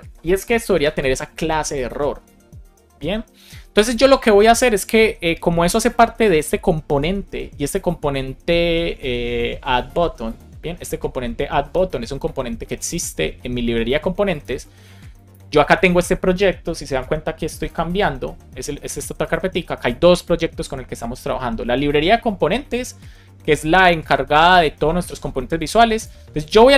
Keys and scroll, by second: 15.2 super+Right.